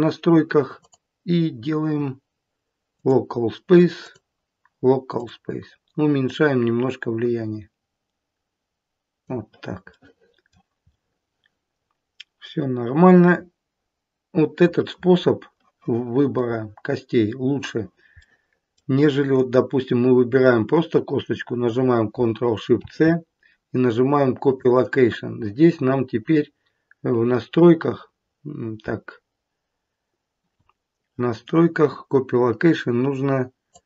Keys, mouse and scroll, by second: 0.7 click, 0.7-1.8 scroll down 1, 3.9 click, 6.1 click, 9.9 middle click, 10.2 middle click, 10.8 middle click, 14.1 middle click, 16.3 middle click, 18.1 middle click, 19.3 click, 22.7 ctrl+shift+c, 33.7 click.